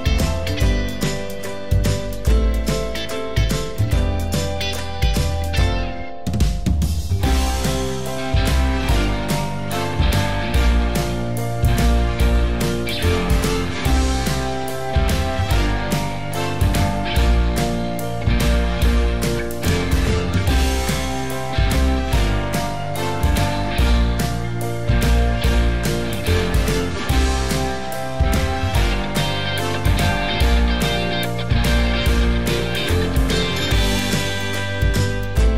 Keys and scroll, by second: 3.4 ctrl+c, 3.5 ctrl+v, 31.0 ctrl+d.